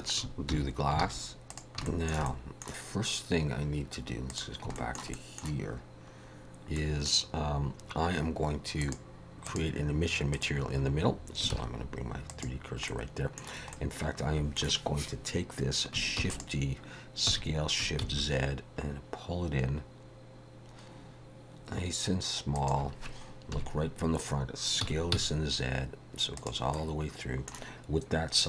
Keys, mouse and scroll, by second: 0.5 alt+h, 1.0 alt+a, 1.5 click, 1.9 shift+middle click, 2.3 middle click, 4.3 click, 4.7 shift+middle click, 5.1 middle click, 6.8 middle click, 8.8 click, 11.5 shift+s, 12.9 middle click, 13.7 middle click, 16.2 shift+d, 17.3 s, 23.5 KP_1, 24.8 s, 26.7 middle click.